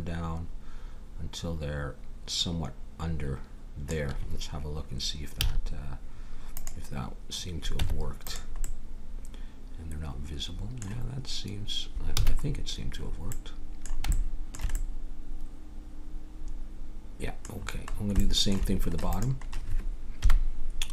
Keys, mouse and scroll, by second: 5.4 z, 7.7 Tab, 12.1 a, 13.0 middle click, 14.3 middle click, 14.8 middle click, 15.0 middle click, 18.2 middle click, 19.0-20.8 drag, 20.1 KP_1.